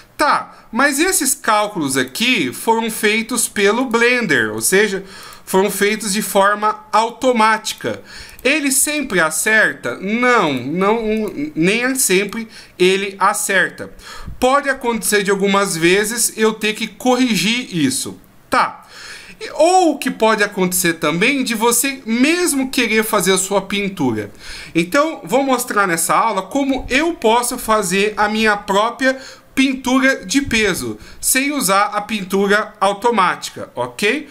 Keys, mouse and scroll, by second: 0.9 right click, 2.0 right click, 2.9 right click, 3.8 right click, 4.6 right click, 5.2 right click, 6.0 right click, 7.0 right click, 7.7 right click, 8.3 right click, 8.9 right click, 9.4 right click, 10.4 right click, 11.1 right click, 12.1 right click.